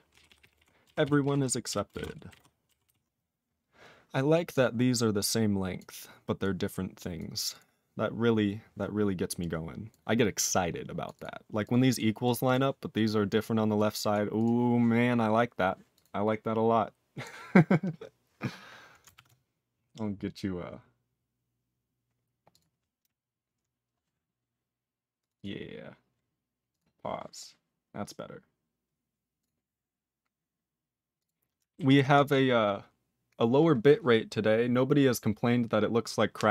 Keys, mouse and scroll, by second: 0.1 ctrl+p, 0.3 ctrl+p, 0.4 ctrl+p, 0.6 ctrl+e, 1.0 ctrl+s, 1.2 ctrl+p, 1.7 ctrl+a, 1.9 ctrl+e, 2.0 ctrl+n, 2.3 ctrl+g, 2.3 ctrl+e, 2.8 ctrl+s, 3.4 ctrl+s, 4.3 click, 4.5 click, 5.2 click, 5.8 click, 6.4 click, 7.2 click, 7.5 click, 7.6 click, 9.4 click, 9.9 click, 10.5 click, 11.0 click, 11.1 click, 11.2 click, 11.7 click, 11.7 click, 11.9 click, 11.9 click, 12.2 click, 12.3 click, 12.4 click, 12.5 click, 13.0 click, 13.4 click, 13.8 click, 14.1 click, 14.4 click, 14.4 click, 15.9 click, 16.0 click, 17.4 scroll down 1, 22.5 click, 22.5 click, 31.2 click, 31.3 click, 31.9 ctrl+s, 32.2 click, 32.3 click.